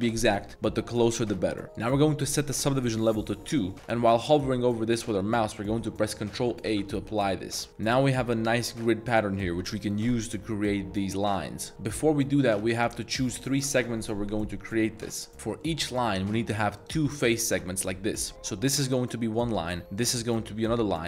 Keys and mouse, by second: 3.7 middle click, 6.6 ctrl+a, 7.5 middle click, 8.0-9.9 middle drag, 11.6 middle click, 11.7 a, 11.9 a, 14.8 middle click, 16.1 middle click, 16.7 alt+click, 17.2 alt+shift+click, 19.5 middle click, 19.9 alt+shift+click.